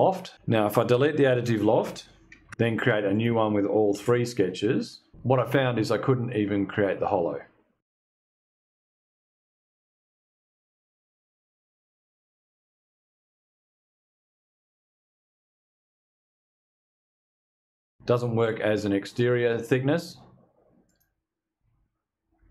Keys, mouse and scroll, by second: 0.8 click, 1.9 Delete, 2.5 click, 2.7 f, 3.1 click, 3.2 ctrl+click, 3.8 click, 4.0 click, 7.4 click, 8.5 ctrl+click, 9.6 click, 14.5 click, 16.9 click, 20.3 click.